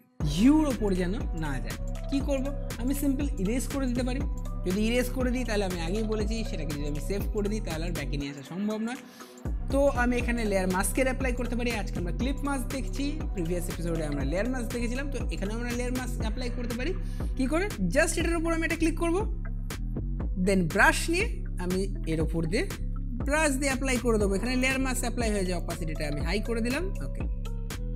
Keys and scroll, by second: 22.9 Caps_Lock.